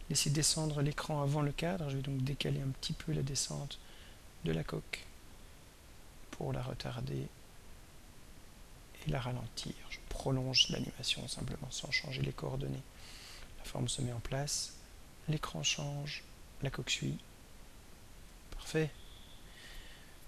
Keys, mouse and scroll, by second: 2.4 click, 5.7-7.3 drag, 8.0-10.1 drag, 11.1-20.2 drag.